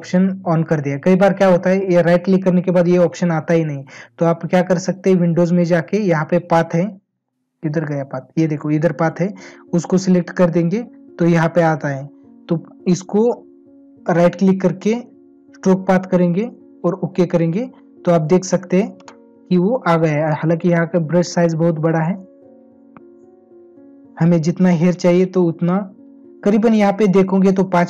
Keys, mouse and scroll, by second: 13.9 right click.